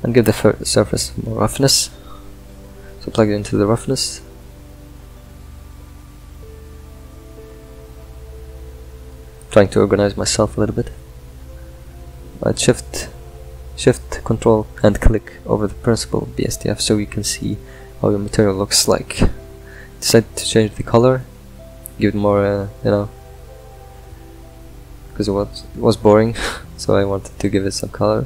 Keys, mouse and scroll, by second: 0.4 click, 2.6 scroll up 4, 6.9 click, 9.1-11.4 drag, 13.5-18.2 middle drag, 18.2-19.3 drag, 20.6-28.2 ctrl+middle drag.